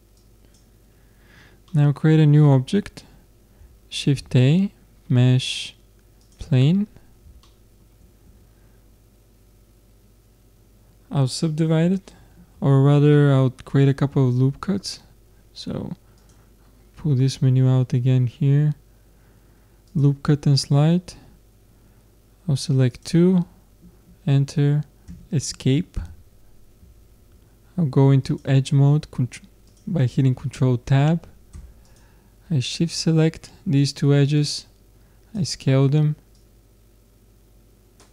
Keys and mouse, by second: 1.0-2.6 middle drag, 2.7 middle click, 4.0 shift+a, 6.7 middle click, 8.2 Tab, 16.2-18.0 drag, 18.0-19.9 middle drag, 19.9-21.8 drag, 27.0 ctrl+Tab, 29.7-31.5 drag, 31.9-33.6 drag, 34.4-36.3 drag, 36.3-38.0 drag.